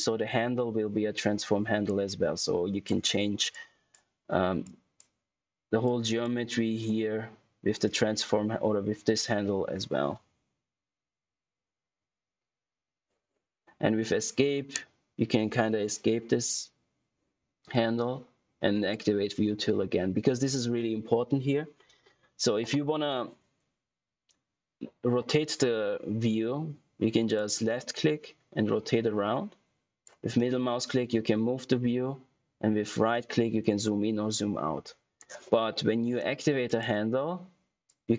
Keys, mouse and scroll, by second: 2.1 click, 10.8 ctrl+Num_Lock, 11.4 ctrl+z, 27.3 click, 30.3 middle click, 32.8 right click, 36.6 click.